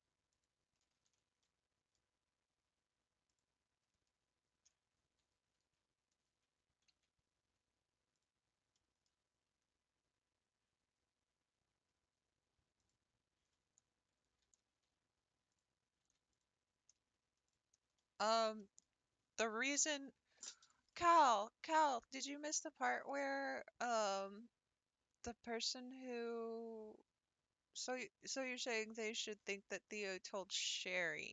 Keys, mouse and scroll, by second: 0.4 shift+click, 1.3 ctrl+z, 1.5-2.1 middle drag, 2.1 scroll up 3, 3.4 shift+click, 5.5 ctrl+i, 8.2 x, 8.7-9.2 middle drag, 9.2-10.3 scroll down 12, 10.3-12.9 scroll up 1, 12.9 click, 14.4 alt+h, 15.0-15.4 scroll up 4, 15.6 click, 16.4 x, 16.7-17.2 scroll up 6, 17.5 click, 17.9-19.9 shift+middle drag, 19.9 click, 20.6-22.4 shift+middle drag, 22.4 scroll up 4, 22.8 shift+middle click, 23.2-23.7 scroll down 3, 30.0-31.3 shift+middle drag.